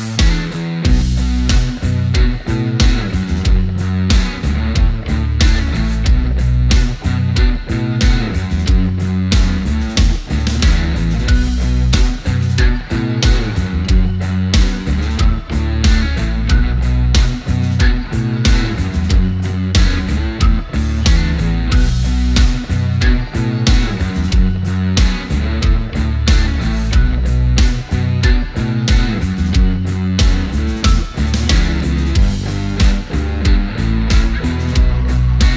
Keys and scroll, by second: 18.1-19.0 typing.